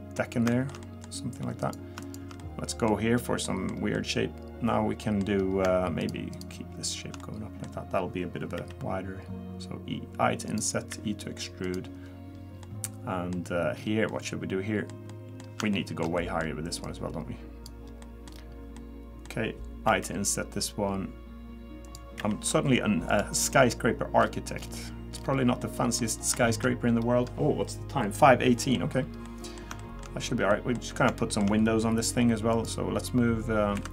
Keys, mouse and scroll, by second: 0.5 shift+middle click, 0.8 middle click, 1.6 click, 2.0 shift+click, 2.4 middle click, 3.5 middle click, 4.0 middle click, 5.4 scroll up 1, 6.0 shift+click, 6.3 shift+click, 7.2 middle click, 8.6 i, 10.9 e, 12.0 scroll down 1, 12.6 middle click, 13.4 scroll up 2, 13.8 scroll down 4, 14.1 middle click, 15.1 middle click, 15.7 shift+middle click, 16.2 middle click, 16.8 click, 17.9 scroll down 1, 18.0 middle click, 18.3-19.0 scroll up 3, 18.8 middle click, 19.9 i, 22.2 e, 23.4 scroll down 2, 23.7 middle click, 24.2-24.8 scroll down 7, 25.1-25.5 scroll up 1, 25.6 middle click, 25.6-26.3 scroll up 7, 26.3 shift+middle click, 26.7-28.3 scroll up 1, 28.6 middle click, 28.9 scroll up 1, 29.2 middle click, 29.8 shift+middle click, 30.3 scroll down 1, 30.5 middle click, 30.9 scroll up 1, 31.2 shift+middle click, 32.5 click, 33.8 2.